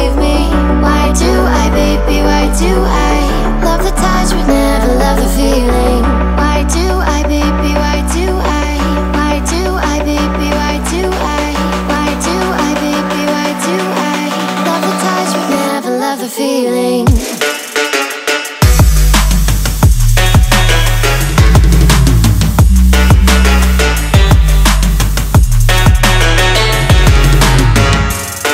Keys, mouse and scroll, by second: 0.5-4.0 drag, 13.1-14.3 drag, 14.3 x.